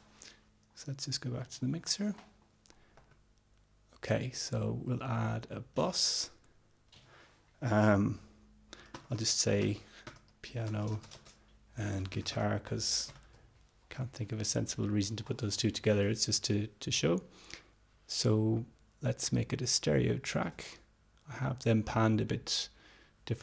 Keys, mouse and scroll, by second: 0.0 click, 3.2 middle click, 4.8-6.1 drag, 6.1-6.7 scroll up 2, 6.7-7.3 scroll up 1, 8.9-13.3 typing, 18.4-20.3 drag, 21.7-22.7 drag.